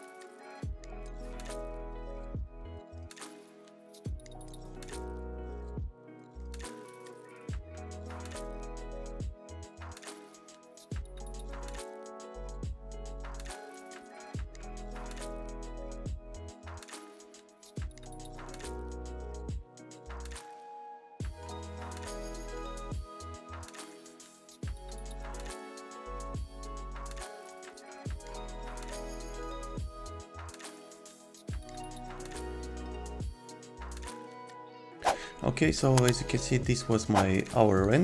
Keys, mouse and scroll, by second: 4.3 Escape, 10.2 i, 10.8 a, 11.4 j, 13.1 2, 36.1 click.